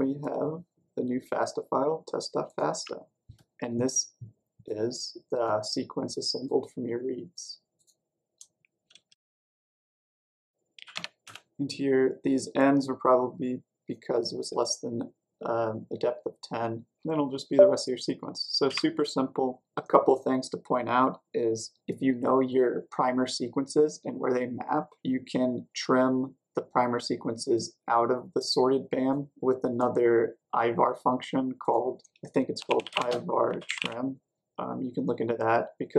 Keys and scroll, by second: 8.9-11.2 typing, 18.6 typing, 32.3-34.2 typing.